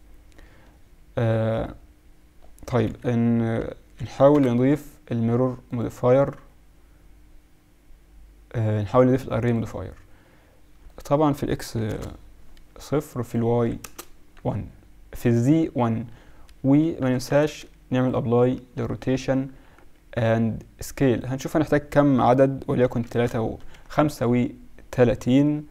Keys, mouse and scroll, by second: 2.8 KP_1, 3.6 KP_Subtract, 3.8 KP_Subtract, 4.3 ctrl+Up, 10.8-12.9 drag, 13.2 click, 15.9 ctrl+a, 16.5 Escape, 17.0 Tab, 17.4 ctrl+a, 18.8 z, 19.2 z, 19.9 z, 21.0-22.9 drag, 23.7 KP_Subtract, 25.2-25.7 KP_Subtract.